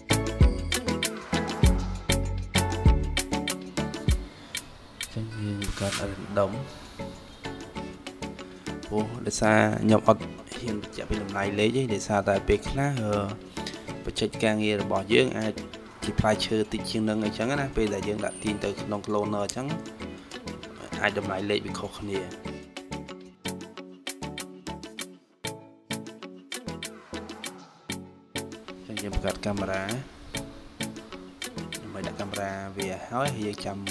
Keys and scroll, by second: 31.9 0, 32.9 0.